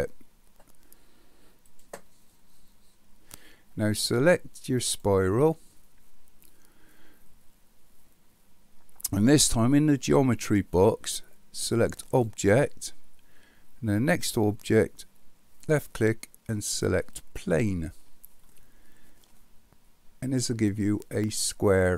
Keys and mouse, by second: 4.8 click, 12.0 click, 15.7-17.4 drag, 19.4-21.9 middle drag.